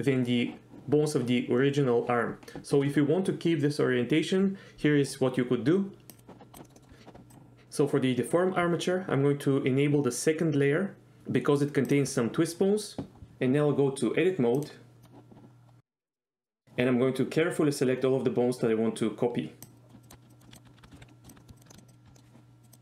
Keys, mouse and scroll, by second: 6.6 middle drag, 6.8 middle click, 7.3 drag, 11.9 shift+click, 14.9 click, 15.9 middle click, 19.8 click, 20.0 shift+click, 20.3 shift+click, 20.5 middle click, 20.5 shift+click, 20.9 middle click, 21.0 alt+h, 21.1 middle click, 21.3 shift+click, 21.4 middle click, 21.6 shift+click, 21.7 middle click, 21.8 shift+click, 21.9 shift+click, 22.2 middle click, 22.6 click, 22.7 click.